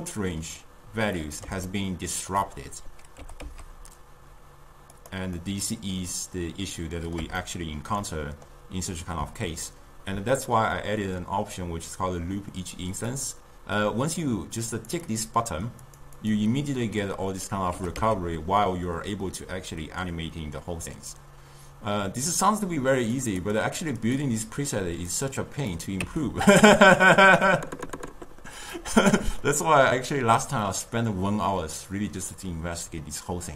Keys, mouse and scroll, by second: 3.2 g, 5.4-11.1 middle drag, 13.0 click, 14.7 click, 15.1 click, 15.9 click, 16.2 click, 17.8 g, 23.2 click, 23.5 click, 24.0 click, 25.1-26.0 drag, 26.0 Tab, 26.6-28.6 ctrl+middle drag, 28.6-29.5 drag, 29.5-33.5 ctrl+middle drag.